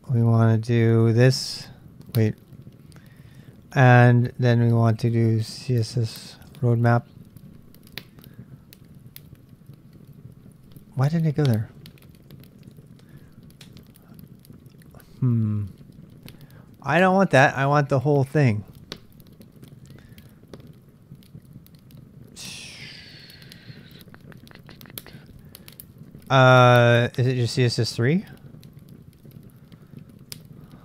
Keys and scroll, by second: 1.1 typing, 2.2 typing, 3.6-5.1 typing, 6.5 Return, 12.6 BackSpace, 12.7 BackSpace, 13.6 Return, 16.7-20.0 k, 26.1-26.8 k, 27.6 j, 30.3 l.